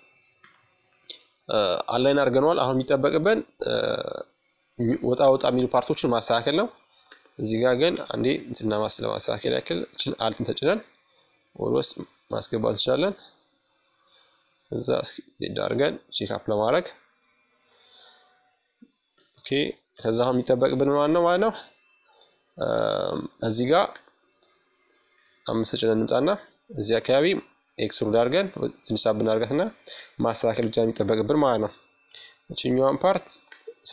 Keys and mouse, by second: 0.3-3.1 drag, 4.6-9.2 right drag, 5.5 Tab, 8.9-12.4 drag, 12.4 Tab, 13.7-16.1 middle drag, 17.4 KP_1, 19.2-20.5 middle drag, 21.5 right click, 21.9-23.2 middle drag, 22.7 KP_5, 23.2 right click, 24.0-27.6 drag, 27.6 middle click, 28.1 Tab, 30.0-31.0 drag, 31.8-33.9 right drag, 31.8 i.